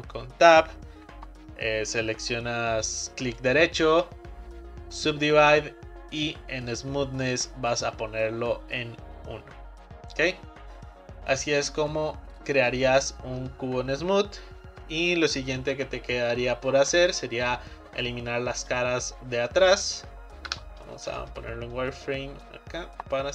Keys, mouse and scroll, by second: 3.4-6.5 right drag, 12.4-12.8 scroll down 2, 12.8-15.8 middle drag, 16.8-18.1 middle drag, 18.1 click, 19.7 middle click, 20.5 z, 21.9 middle click, 22.5 click.